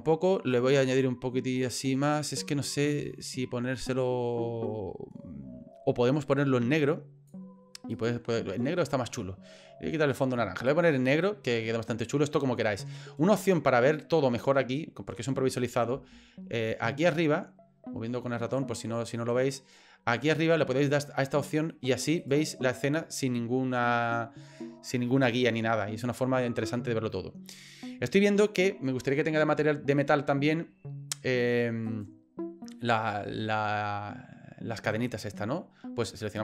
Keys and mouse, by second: 7.9 right click, 21.4 click, 22.2 right click, 31.8 right click.